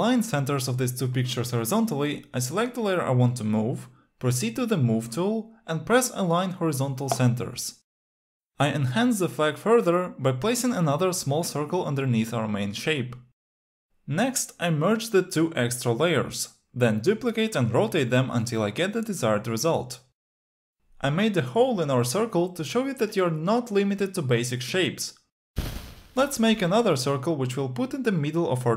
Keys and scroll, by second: 14.5 shift+e, 16.3 ctrl+j.